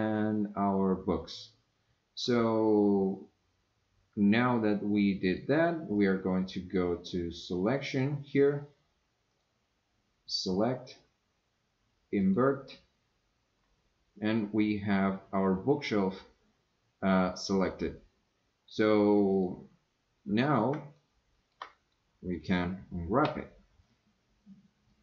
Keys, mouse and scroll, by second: 5.2 click, 6.0 click, 7.3 click, 9.3 click, 10.3-12.3 drag, 19.3 click, 20.9 shift+middle click, 23.2 u.